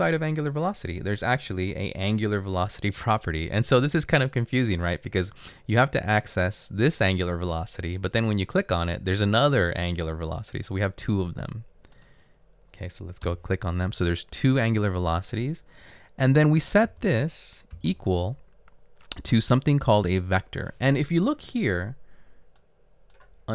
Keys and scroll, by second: 13.3 Return, 17.0-17.9 typing.